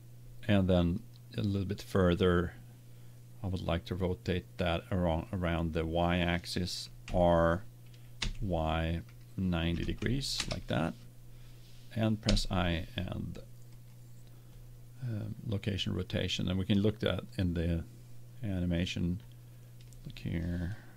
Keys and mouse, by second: 1.0-2.9 drag, 7.0 r, 12.2 i, 17.3-18.4 drag.